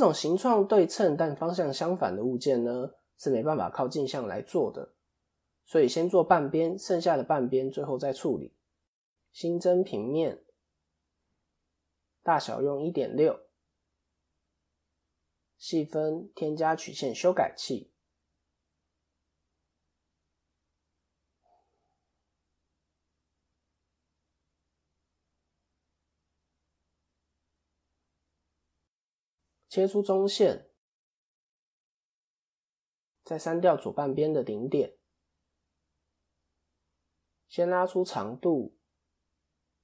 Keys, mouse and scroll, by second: 3.6-4.6 scroll down 1, 6.5-7.4 scroll down 2, 6.5 KP_7, 7.6 shift+middle click, 7.9-8.7 shift+scroll down 2, 8.7 scroll down 1, 8.8 shift+a, 11.2 click, 17.4 click, 26.2 click, 26.5 scroll up 2, 27.3 scroll up 5, 27.3-28.0 scroll down 2, 28.4 ctrl+r, 31.8 click, 32.7 x, 33.8-34.2 scroll down 1, 34.9 scroll down 2, 35.8 click.